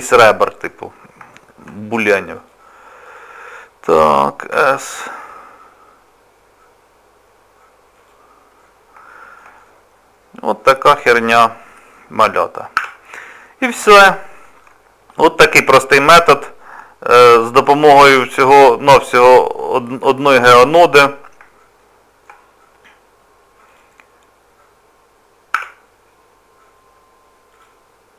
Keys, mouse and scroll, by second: 0.0 middle click, 0.9 scroll up 1, 1.3 shift+middle click, 2.3 click, 3.0 click, 4.6 s, 8.5 scroll down 1, 9.1 shift+middle click, 9.6 middle click, 12.3-12.7 scroll down 2, 12.9 Tab, 14.1 shift+middle click, 15.5 click, 16.9-17.2 scroll down 2, 18.3 click, 20.5 click, 21.8 shift+middle click, 23.7 click, 25.5 Tab, 25.9-27.5 scroll down 3, 26.4-27.5 scroll up 1, 27.5 click.